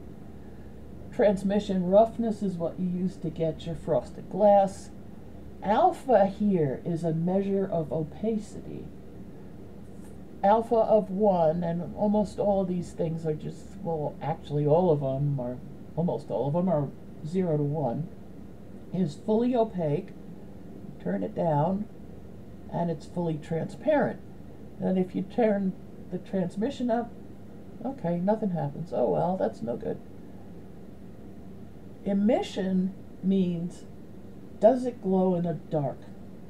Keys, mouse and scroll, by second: 19.8-22.5 drag, 25.0-26.4 drag, 28.4 click, 30.5 click.